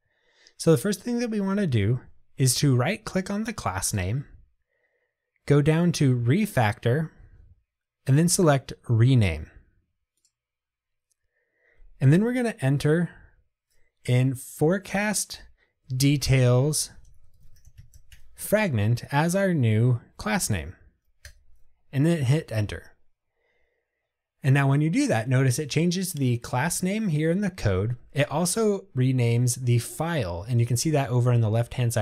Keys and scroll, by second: 10.4 shift+F6.